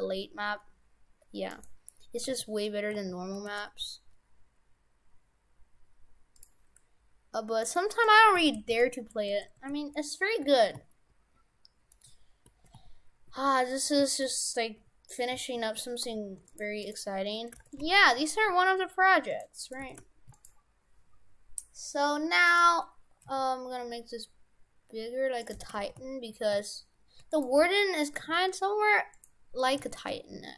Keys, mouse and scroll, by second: 1.6 right click, 2.3 g, 2.4 z, 3.0 a, 3.4 g, 7.7 right click, 8.1 right click, 8.4 shift+f, 8.9 Tab, 9.4 shift+f, 16.8 right click, 17.6 shift+f, 19.6 right click, 19.8 shift+f, 22.5 right click, 23.3 s, 25.6 shift+f, 27.6 g, 28.2 g, 29.8 s.